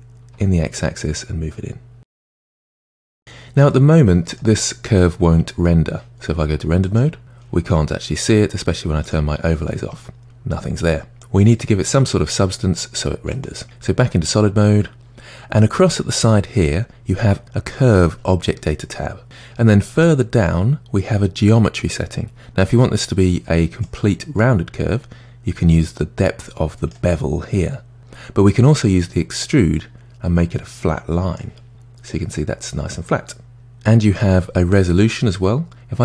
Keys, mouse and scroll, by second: 2.3-3.0 middle drag, 3.0-3.7 scroll down 3, 3.7-6.7 middle drag, 7.2 click, 9.0 click, 13.3 click, 20.0-23.2 scroll down 2, 23.8-26.9 drag, 28.9-31.7 drag, 31.7-33.5 middle drag.